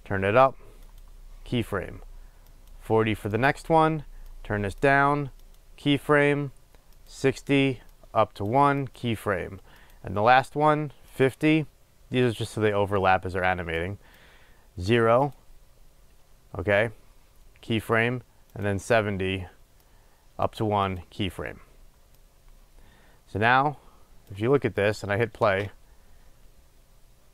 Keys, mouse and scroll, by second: 0.2-1.2 drag, 2.7 click, 4.6-5.7 drag, 7.2 click, 8.2 click, 11.3 click, 14.0-15.6 drag, 18.7 click, 20.2-21.2 drag, 22.4-25.2 drag, 25.6 space.